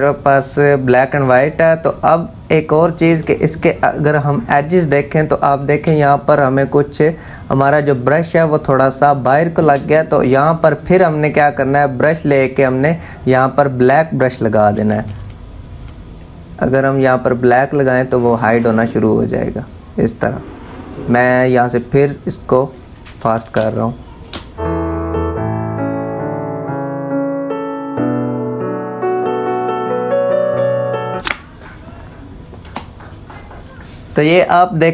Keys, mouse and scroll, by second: 2.7 z, 3.3-4.6 drag, 4.6 space, 4.7 click, 5.1 space, 8.0 space, 8.1 click, 8.5 space, 9.6-12.1 drag, 12.1 click, 14.3 [, 15.8-23.2 drag, 23.2 space, 23.3 click, 23.7 space, 24.7 ], 24.9-27.1 drag, 27.1 space, 27.2 click, 27.9 space, 28.3 click, 28.8 space, 29.3 click, 30.0 space, 30.2 click, 30.5 space, 30.6 click, 32.3 v.